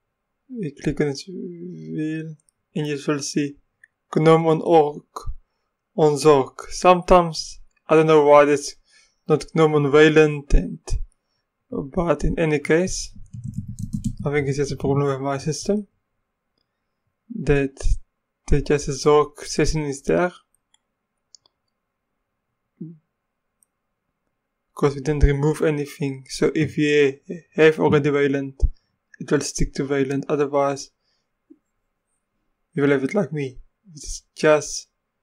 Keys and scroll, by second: 13.1-14.6 typing, 15.0 Return.